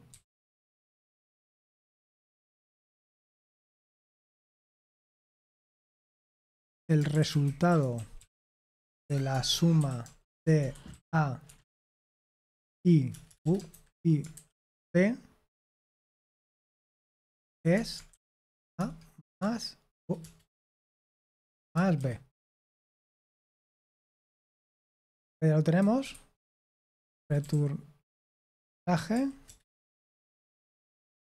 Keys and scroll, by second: 0.1-14.3 typing, 16.8-18.7 typing, 19.3 Return, 19.9 BackSpace, 20.2 BackSpace, 21.6-31.3 typing.